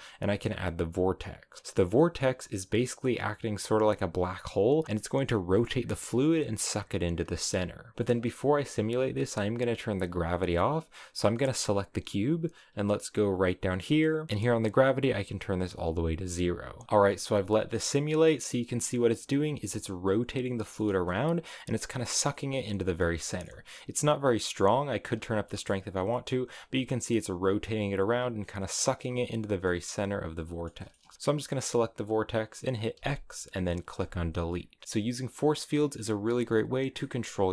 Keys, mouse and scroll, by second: 1.6 middle click, 1.7 scroll up 1, 1.8-4.8 middle drag, 4.8-5.5 scroll up 1, 7.2 g, 7.9-10.5 middle drag, 10.5 right click, 12.5-16.8 drag, 16.8-23.0 middle drag, 23.0 space, 23.1-24.1 middle drag, 24.1-25.2 drag, 25.2 space, 25.4-30.9 middle drag, 30.9 space, 31.1 middle click, 31.3 right click, 32.8 x, 34.7 scroll up 1, 34.8 middle click, 35.2 space, 37.1 middle click.